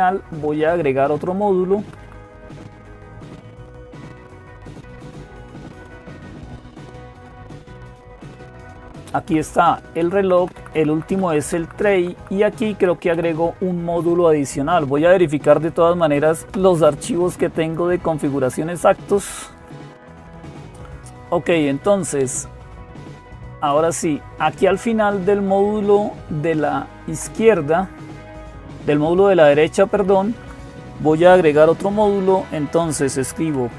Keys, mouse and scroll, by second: 1.6 Right, 1.8 Right, 2.2 Right, 4.6 Down, 4.6 Up, 4.6-6.0 Right, 6.4 Right, 6.6 Right, 6.9 Right, 7.1 Right, 7.3 Right, 8.4 Right, 8.6 Right, 8.8 Right, 9.8 Right, 10.0 Right, 10.4 Right, 10.5 Right, 10.7 Right, 10.9 Right, 11.1 Right, 11.2 Right, 11.6 Right, 11.8 Right, 12.5 Right, 12.5 Left, 17.4 click, 20.0 click, 21.0 Down, 21.0 Left, 21.0 Right, 23.3 click, 26.4 Left, 27.2 Up, 28.6 Down, 30.2 Right.